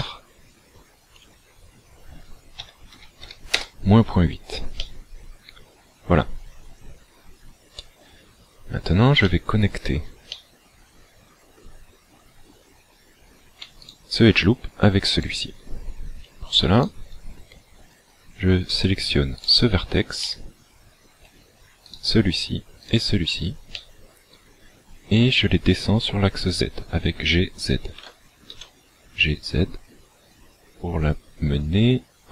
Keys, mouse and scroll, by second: 4.8 middle click, 8.6 scroll up 2, 9.3 shift+middle click, 10.4 middle click, 13.8 alt+right click, 15.2 alt+shift+right click, 16.8 alt+right click, 19.4 right click, 20.2 middle click, 21.9 shift+right click, 22.9 shift+right click, 23.8 middle click, 28.0 g.